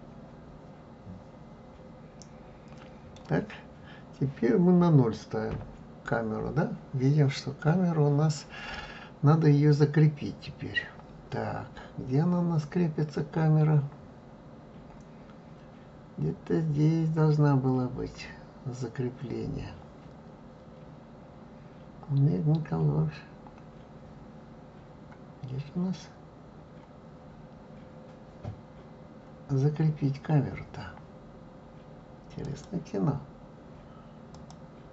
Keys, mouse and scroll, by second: 5.8 KP_0, 17.6 scroll down 1, 20.2-21.6 scroll down 7, 24.3-25.2 scroll up 1, 25.2-25.6 scroll up 1, 26.9-29.2 scroll up 2, 29.2-29.9 scroll up 1, 30.0-30.9 scroll up 3, 32.7 click, 34.6 click.